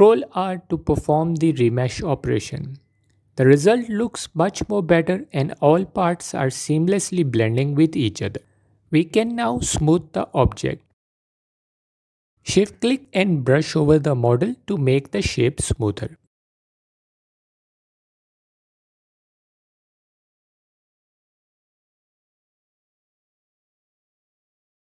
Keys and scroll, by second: 1.0 ctrl+r, 20.6 f.